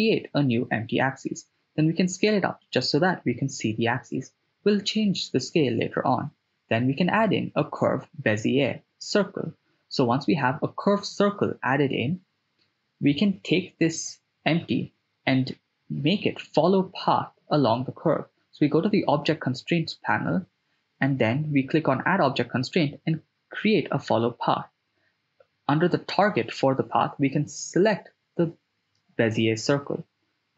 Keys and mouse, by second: 0.6 s, 1.6 click, 3.7 shift+a, 9.0 s, 10.5 click, 11.6 ctrl+middle drag, 11.7-12.1 ctrl+drag, 13.3 right click, 16.2 click, 17.7-19.7 drag, 21.1 click, 21.8-25.4 drag, 27.7 click.